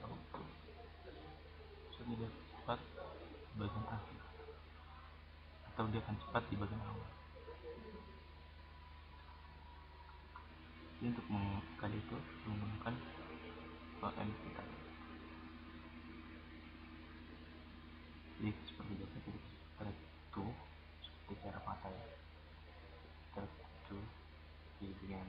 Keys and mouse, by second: 2.2 click, 8.9-10.0 drag, 12.9-14.6 right drag, 14.6 middle click, 16.3-17.9 drag, 19.9-21.9 right drag, 22.7 right click, 23.2-25.2 drag.